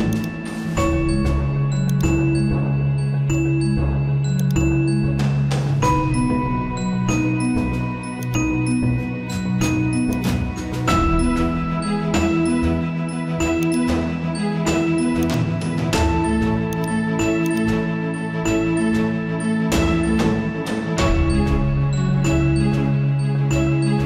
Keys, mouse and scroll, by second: 7.2 ctrl+t, 8.2-22.3 drag, 14.5 typing.